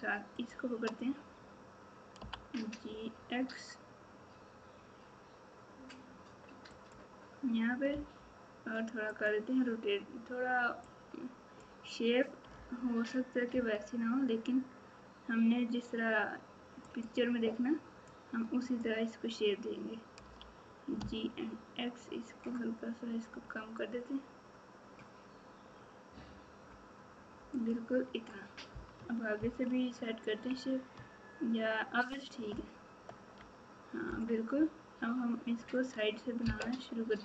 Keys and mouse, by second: 0.3 shift+click, 2.1 g, 7.9 r, 10.9-12.5 drag, 12.5 g, 18.1 click, 20.2 g, 29.3 ctrl+KP_2, 32.5 ctrl+KP_8.